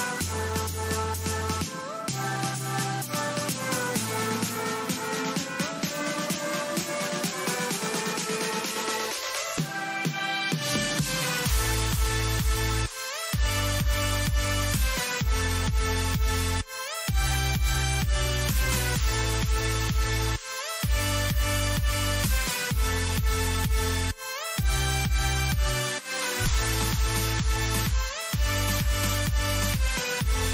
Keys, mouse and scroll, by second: 0.1-3.8 right drag, 2.8 alt+m, 5.8-9.1 middle drag, 9.2 middle click, 9.4 middle click, 11.1 middle click, 12.8 KP_3, 13.3 z, 15.7 z, 18.3 a, 18.8 z, 19.1 z, 23.9-26.7 middle drag.